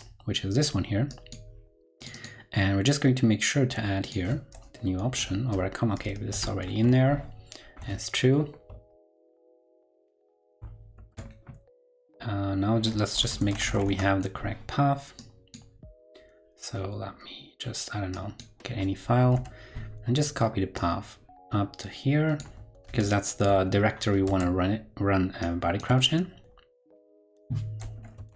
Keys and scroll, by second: 4.9 super+Right, 6.4 shift+super+Left, 9.7 super+s, 10.2 super+w, 10.9 shift+super+w, 13.2 super+space, 22.8 super+c, 24.2 super+Tab, 25.9 super+Tab.